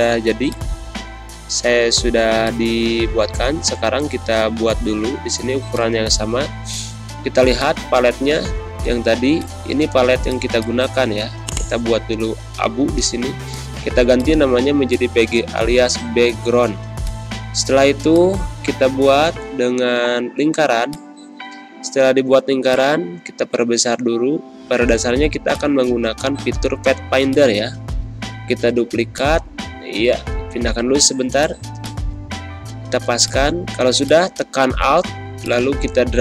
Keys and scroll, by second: 25.2 space, 31.5 z, 32.0 space, 32.7 v.